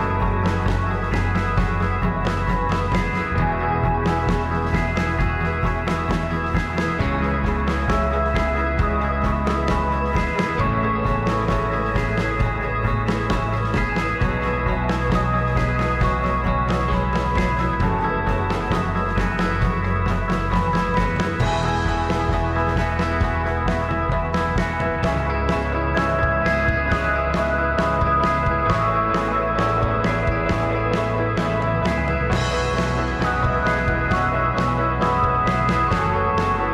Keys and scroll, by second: 1.3 g, 2.2 ctrl+a, 4.0 ctrl+a, 4.4 ctrl+a, 5.3 Escape, 7.1 ctrl+r, 7.4 ctrl+a, 8.4 ctrl+a, 9.0 ctrl+a, 9.5 ctrl+a, 11.6 ctrl+r, 12.0 Escape, 13.0 r, 17.7 g, 18.1 g, 18.5 g, 19.1 g, 19.7 ctrl+a, 21.5 ctrl+a, 22.0 ctrl+a, 22.5 ctrl+a, 27.9 g, 29.7 ctrl+r, 34.4 g, 35.1 ctrl+a, 36.0 alt+z.